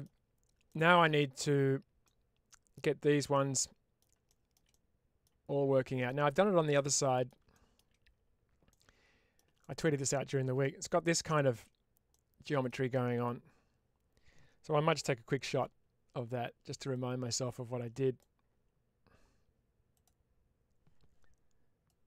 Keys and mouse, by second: 0.6 middle click, 1.9 middle click, 3.2 middle click, 4.2 shift+middle click, 4.6 middle click, 5.7 middle click, 6.6 middle click, 7.4 shift+middle click, 8.6 middle click, 9.5 shift+middle click, 10.5 middle click, 11.1 shift+middle click, 12.0 middle click.